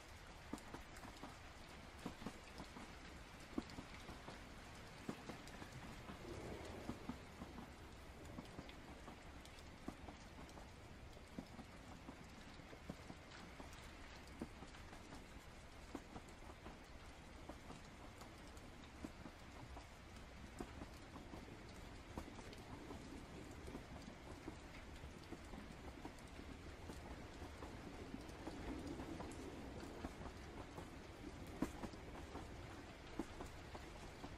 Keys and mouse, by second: 0.5 click, 0.9 click, 1.8 ctrl+z, 2.0 click, 3.4 ctrl+z, 6.7-8.0 drag, 8.3 ctrl+z, 8.7-11.2 drag, 11.6 ctrl+z, 12.5-15.6 drag, 16.1-17.1 drag, 20.5 click, 21.9-23.1 drag, 23.8 click, 25.8 click, 26.8-27.9 drag, 28.1 ctrl+z, 28.4-29.8 drag, 31.2 click, 33.6-34.3 drag.